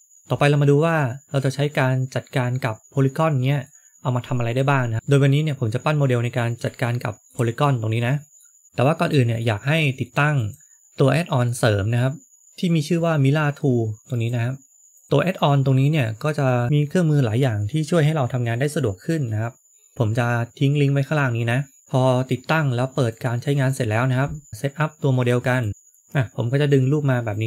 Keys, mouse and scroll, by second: 3.5 middle click, 5.2 middle click, 6.8 shift+middle click, 7.6 middle click, 9.0 middle click, 10.3 click, 23.9 click, 24.6 shift+middle click, 24.6 scroll up 1, 26.7 click.